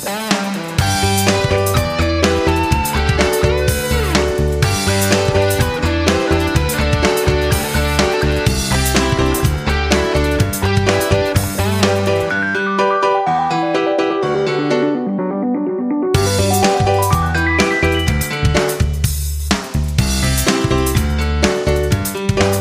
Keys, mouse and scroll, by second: 0.8 click, 22.3-22.6 scroll down 1.